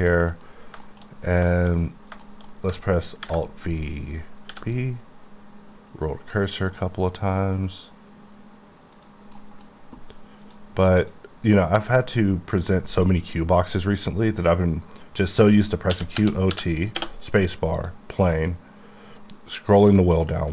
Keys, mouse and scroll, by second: 0.3-0.8 scroll down 7, 0.9 shift+middle click, 1.2 scroll up 3, 1.6 shift+scroll down 1, 1.8-2.2 shift+scroll up 3, 2.3 shift+middle click, 3.3 alt+v, 4.5 b, 4.9-5.9 scroll up 3, 7.0 scroll up 2, 9.0 click, 9.4 middle click, 10.5 click, 11.1 click, 16.0-16.6 typing, 17.8 click, 18.4 ctrl+click, 19.3 ctrl+scroll down 1, 19.9 ctrl+click, 20.2 click, 20.3 middle click.